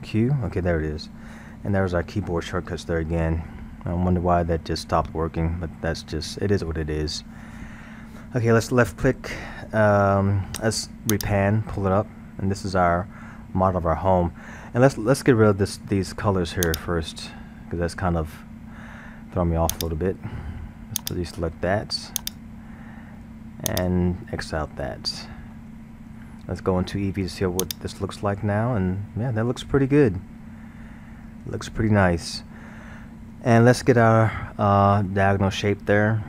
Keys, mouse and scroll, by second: 0.0 ctrl+alt+q, 2.4 scroll, 3.5-10.8 middle drag, 11.1 click, 12.1 scroll, 12.6-14.4 middle drag, 14.4 scroll, 16.7 click, 18.9-19.8 scroll, 19.8 click, 21.0 click, 22.2 click, 23.7 click, 24.7-27.6 middle drag, 27.6 click, 28.2-31.3 middle drag.